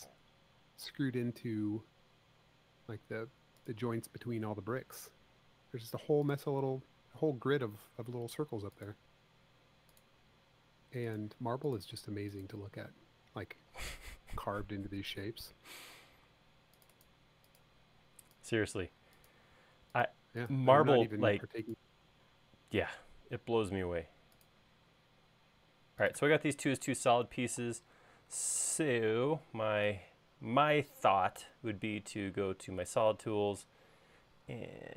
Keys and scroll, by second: 28.7 super+s.